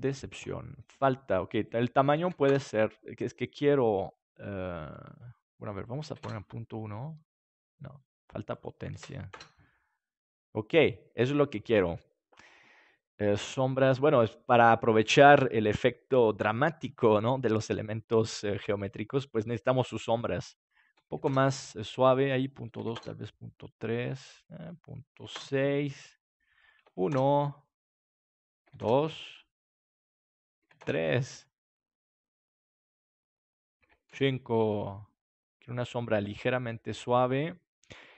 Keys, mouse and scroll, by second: 1.6 click, 2.9 click, 5.8 click, 6.5-9.4 drag, 20.7 click, 21.7 click, 25.8 click, 26.8 click, 27.4-28.6 drag, 29.2 click, 31.9 click, 33.6 click.